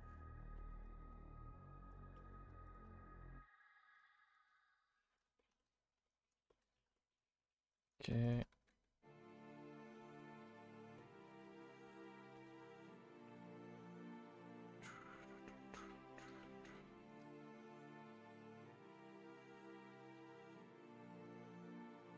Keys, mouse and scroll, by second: 0.2-1.9 middle drag, 1.9 click, 2.1 middle click, 2.6 shift+click, 3.9 click, 4.2 shift+click, 5.3 shift+middle click, 6.3 scroll up 1, 6.5-7.6 middle drag, 7.6 click, 8.2 shift+click, 9.5-10.9 middle drag, 11.0-11.4 middle drag, 11.4 a, 11.6 a, 11.8-12.8 middle drag, 12.8 click, 13.1 shift+click, 16.4-17.0 middle drag, 17.0 click, 17.5 shift+click, 17.7-19.2 right drag, 19.2 a, 19.4 a, 19.5-20.8 middle drag, 20.8-21.2 scroll down 1, 21.2-22.1 shift+middle drag.